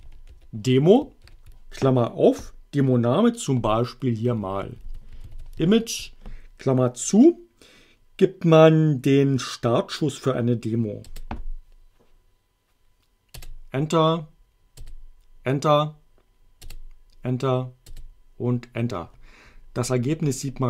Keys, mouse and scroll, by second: 0.0-1.2 typing, 4.1-6.2 typing, 11.1 Return, 13.4 Return, 14.8 Return, 16.6 Return, 17.9 Return.